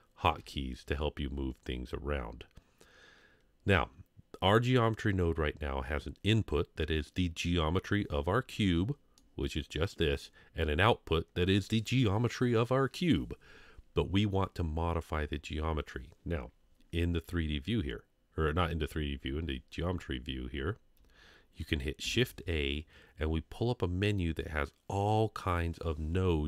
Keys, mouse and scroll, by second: 2.6 Home, 2.6 scroll down 3, 9.2-10.2 middle drag, 22.0 shift+a.